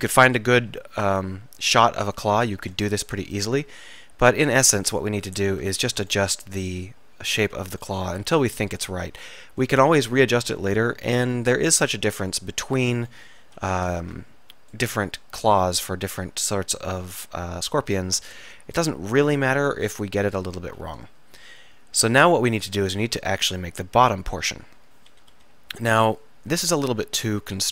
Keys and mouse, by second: 2.8 KP_3, 5.0-6.0 drag, 6.5-8.4 middle drag, 8.4 KP_3, 13.5 a, 13.9 a, 14.1 z, 14.1 b, 17.0 a, 17.3 b, 19.0 click, 20.8 a, 23.3 z, 25.4 KP_1, 26.0 KP_3.